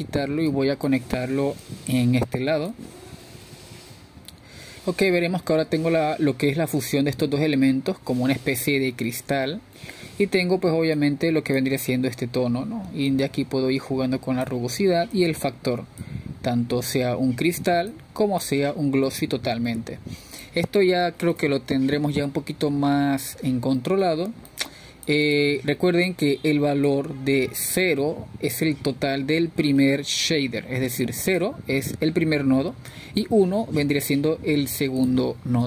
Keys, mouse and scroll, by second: 3.8-4.2 drag, 4.9-6.0 drag, 8.8-14.3 middle drag, 14.3-22.3 drag, 22.3-24.6 middle drag, 24.6-31.8 drag, 34.4-35.6 drag.